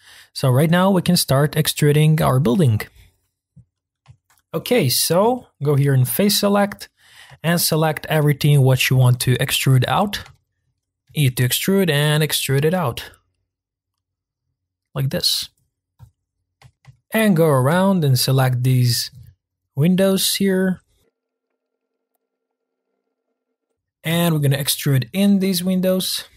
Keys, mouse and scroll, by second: 3.0-3.5 scroll down 1, 3.5-4.2 scroll up 1, 4.2-5.9 shift+middle drag, 5.9 click, 7.5 shift+click, 8.1 shift+click, 8.7 shift+click, 9.5 shift+click, 10.3 shift+middle click, 10.9 scroll down 1, 11.1 e, 16.1 click, 16.7 shift+middle click, 17.4-18.0 scroll up 1, 18.0 shift+click, 18.3 shift+click, 18.6 shift+click, 19.0 shift+click, 19.6 shift+click, 20.1 shift+click, 20.4 shift+click, 20.7-22.4 shift+click, 21.0 shift+click, 21.1 shift+click, 22.6-23.5 shift+click, 22.7 shift+click, 23.7-25.3 middle drag, 25.3-26.3 scroll up 2.